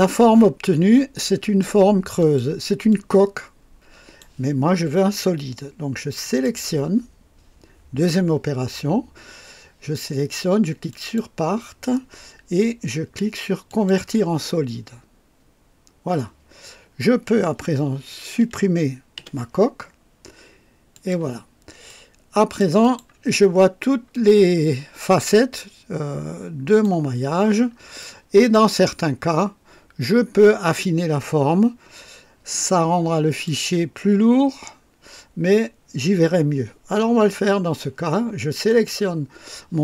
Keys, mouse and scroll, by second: 2.2 click, 2.9-4.4 drag, 6.2 click, 10.9 click, 13.9 click, 19.2 Delete, 20.9 click, 21.9 click, 22.8 click, 23.5 scroll up 1, 24.1-27.0 drag, 27.1-27.5 scroll down 1, 28.0-28.7 right drag, 28.9-33.6 drag, 38.7 click.